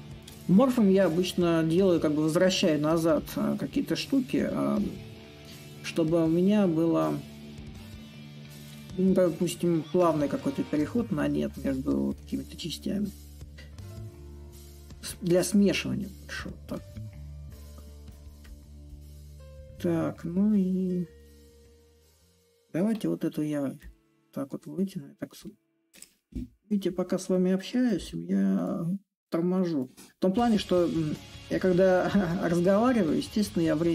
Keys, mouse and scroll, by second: 5.0-10.1 drag, 10.1-15.2 drag, 18.1-22.6 drag, 22.6 a, 23.5-27.0 drag, 27.0-28.2 right drag, 28.2-33.3 drag.